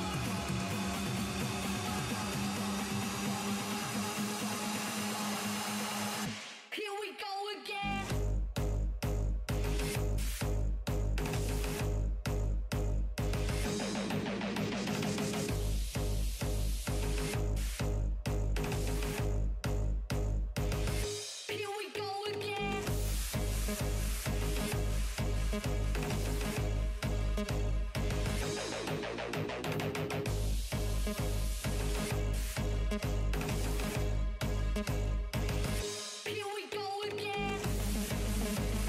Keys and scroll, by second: 5.0 s, 11.9 s, 12.6 s, 31.4 s, 31.7 s, 32.2 s, 33.0 s.